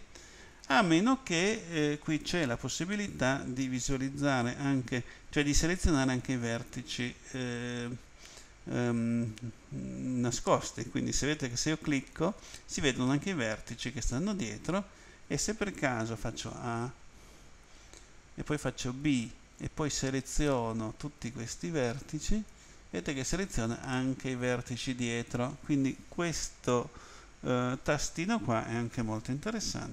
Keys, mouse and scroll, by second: 6.0 click, 11.4 click, 12.0 click, 16.3 a, 18.9 b, 19.6 click, 23.9 middle click.